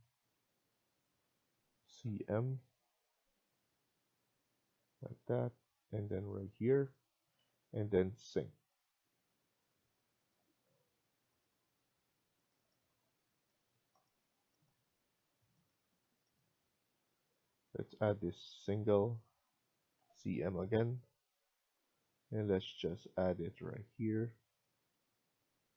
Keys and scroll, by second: 7.2-7.9 typing, 25.0-25.7 typing.